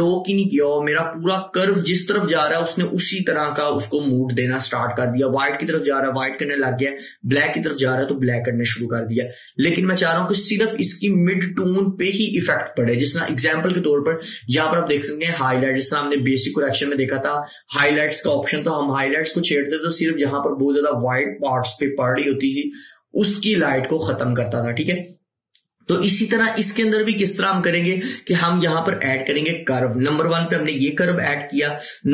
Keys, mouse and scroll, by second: 1.8-11.8 drag.